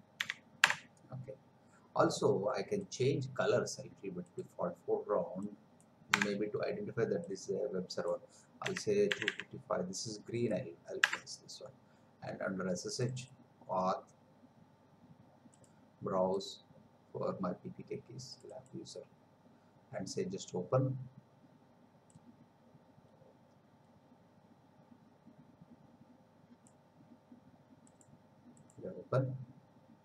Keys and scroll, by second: 0.2 3, 6.1 BackSpace, 8.6 2, 11.0 0.